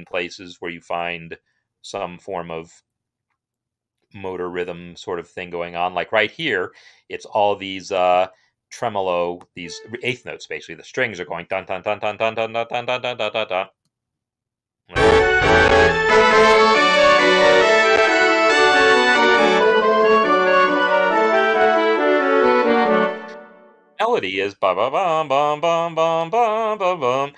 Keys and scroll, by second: 13.6 space, 22.9 space.